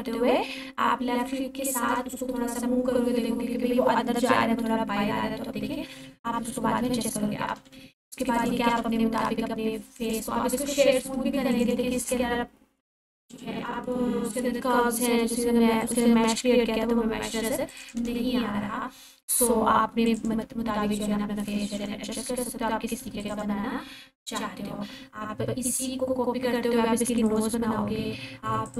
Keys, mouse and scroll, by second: 6.8-9.3 typing, 8.3 click, 10.0 click, 11.5 right click, 12.8 click, 13.6-14.6 scroll up 1, 14.4-16.4 typing, 15.8 click, 17.6-18.6 typing, 17.7 click, 20.1 click, 21.5 ctrl+a, 23.2 click, 27.2 right click.